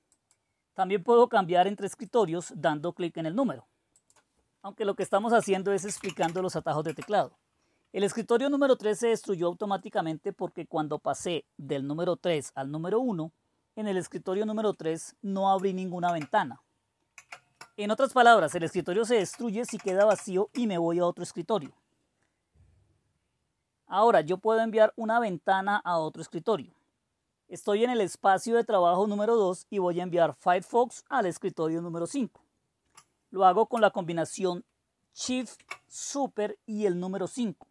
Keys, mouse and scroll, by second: 0.1 click, 2.1 click, 3.9 click, 4.9-8.4 typing, 9.8 click, 10.3 click, 16.0 ctrl++, 17.1 ctrl++, 19.1 Down, 19.6 Down, 19.8 Down, 20.0-20.7 Down, 20.5-21.5 Up, 35.2 super+%.